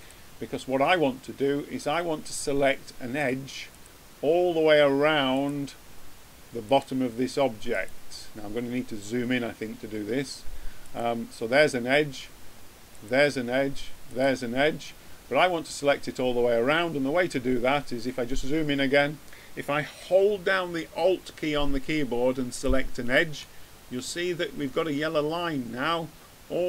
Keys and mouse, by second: 4.7-9.3 drag, 26.5 middle click.